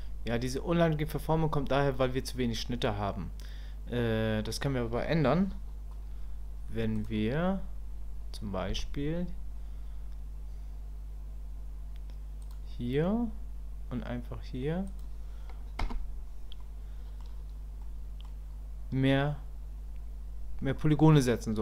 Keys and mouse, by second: 1.4 Tab, 7.0 click, 16.6 click, 17.8 click.